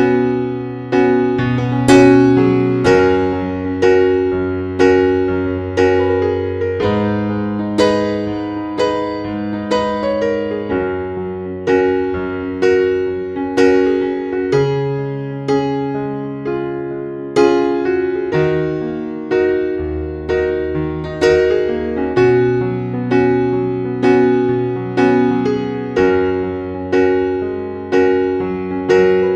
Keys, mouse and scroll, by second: 3.3 Delete, 3.7 right click, 4.4 click, 5.8 scroll down 1, 6.6 click, 9.0 p, 10.5 F5, 11.0-11.8 typing, 12.5 shift+Page_Down, 14.5 click, 15.2-16.3 scroll down 1, 16.3-18.0 drag, 18.9-19.5 scroll up 1, 19.5-25.1 drag, 25.5-26.0 scroll down 1, 26.0 click, 26.6-27.1 scroll up 1, 27.1 click.